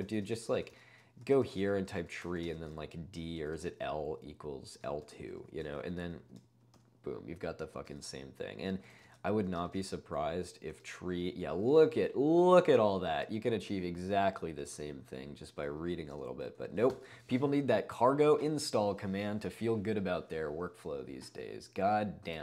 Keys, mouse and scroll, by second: 0.0-3.6 typing, 4.8 typing, 5.7 ctrl+space, 6.0 ctrl+u, 6.1 ctrl+u, 6.1-6.8 typing, 6.2 ctrl+u, 8.6-11.2 typing, 14.7 ctrl+d, 14.9 ctrl+d, 15.2 ctrl+d, 15.3 ctrl+d, 15.7 ctrl+d, 16.2 q, 16.6 Escape, 16.9 ctrl+l.